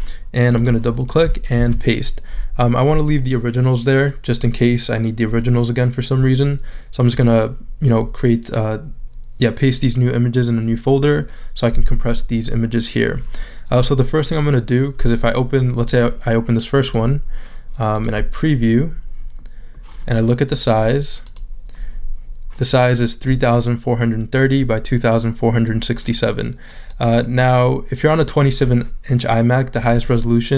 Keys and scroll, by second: 1.6 super+v.